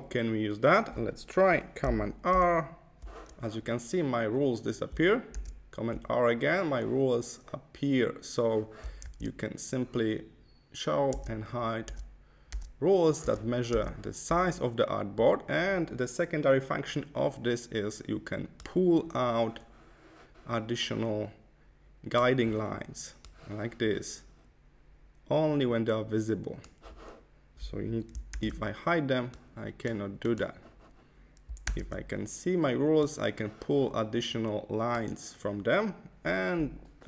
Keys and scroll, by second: 2.2 super+r, 5.2 super+r, 9.0 super+r, 11.0 super+r, 11.7 super+r, 13.1 super+r, 28.3 super+r, 31.7 super+r.